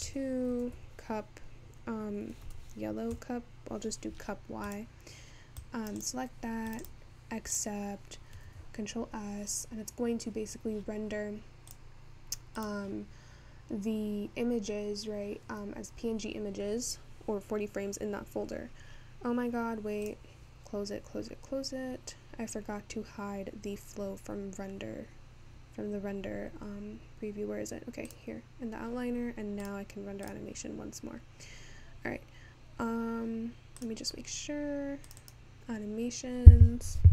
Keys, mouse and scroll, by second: 12.7-37.1 drag.